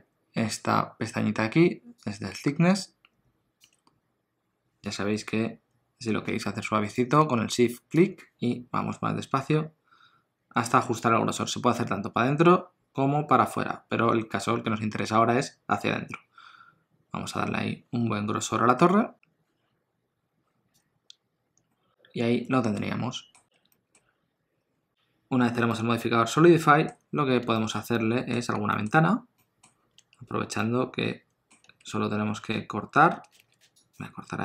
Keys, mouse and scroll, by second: 2.0 click, 8.0 shift+click, 21.7 middle click, 23.7 ctrl+middle click, 24.9 alt+a, 24.9 click, 25.7 middle click, 26.9 scroll down 1, 27.7 shift+middle click, 28.0 middle click, 28.4 scroll down 1, 28.7 shift+middle click, 29.4 middle click, 29.7 scroll down 1, 30.0 Tab, 30.5 middle click, 33.4 ctrl+r.